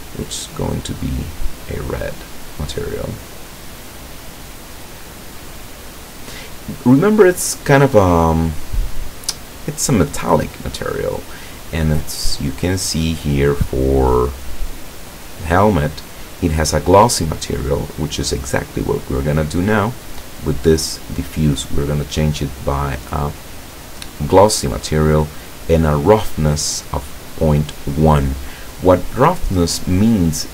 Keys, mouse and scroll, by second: 0.9 click, 2.1-6.1 drag, 7.7-8.9 drag, 12.2-12.6 scroll up 1, 15.5 click, 19.0-19.7 drag, 20.1 click, 21.9 click, 24.4 click, 27.0 click.